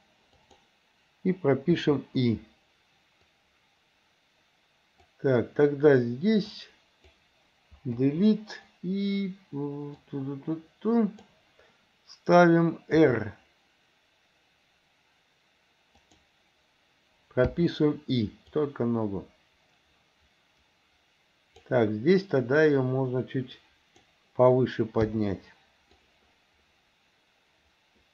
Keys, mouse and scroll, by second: 1.8 i, 3.3-5.2 drag, 6.5 click, 8.0 Delete, 10.1-11.3 drag, 13.0 r, 17.5 i, 18.6-21.7 drag, 22.6 click, 22.8-24.1 drag, 25.1 i, 26.0-28.1 drag.